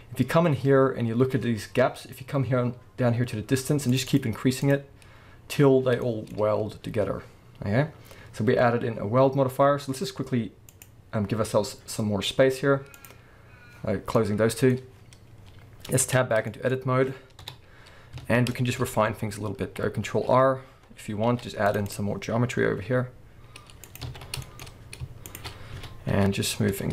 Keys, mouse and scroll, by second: 3.9-6.0 drag, 5.7-6.0 scroll down 1, 6.0-10.7 shift+middle drag, 6.5-10.6 scroll down 1, 10.7 click, 12.9 click, 13.9 scroll down 1, 14.1-15.0 middle drag, 14.9 scroll up 1, 15.4-16.0 scroll down 1, 16.0 Tab, 16.3 middle click, 16.8-17.4 scroll up 1, 17.4 KP_7, 17.9 scroll up 1, 18.2 alt+a, 18.5 shift+middle click, 18.8-20.0 scroll up 1, 20.0 ctrl+t, 20.0-21.9 middle drag, 21.3 ctrl+r, 21.9 click, 22.8 s, 24.0 click, 24.1 alt+a, 24.2 scroll down 1, 24.4-25.3 shift+middle drag, 24.6-25.3 scroll up 2, 25.3 alt+shift+click, 25.7 s.